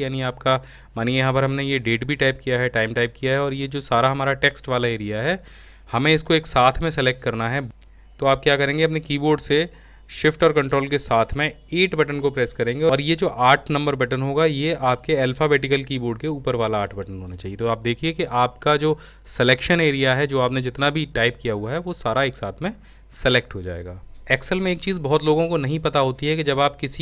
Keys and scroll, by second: 10.7 ctrl+shift+8.